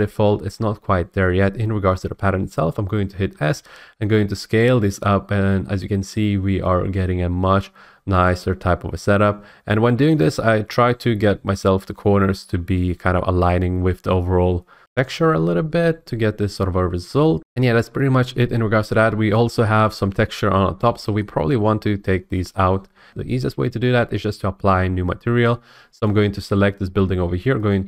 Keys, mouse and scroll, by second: 3.3 s, 10.2-12.4 drag, 14.8 F8, 17.4 Tab, 19.6 scroll, 19.8-20.4 scroll up 3, 20.7-21.2 scroll, 21.2 shift+middle click, 26.1 click, 27.7 click.